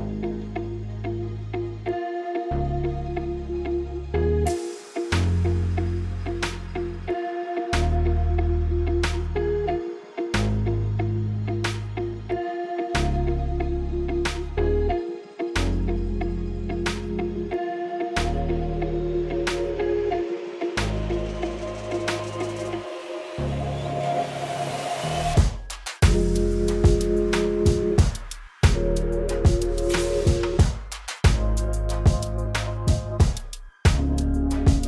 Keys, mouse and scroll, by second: 0.4 Delete, 1.1 shift+a, 12.9-15.9 drag, 19.0 KP_9, 19.2 KP_0, 19.6 Return, 21.6 KP_1, 22.1 middle click, 25.8 click, 27.3 shift+a, 29.1 l, 33.3 click.